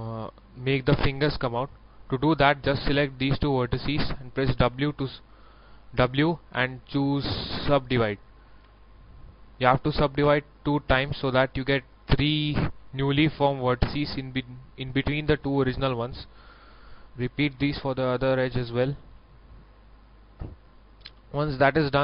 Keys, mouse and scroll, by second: 2.6 shift+right click, 3.5 shift+right click, 4.6 shift+w, 8.3 click, 8.6 w, 9.6 middle click, 10.8 scroll up 1, 11.7 scroll down 1, 12.4 right click, 13.4 shift+right click, 15.4 a, 16.1 right click, 16.9 shift+right click, 17.8 shift+w, 18.6 click, 20.4 middle click.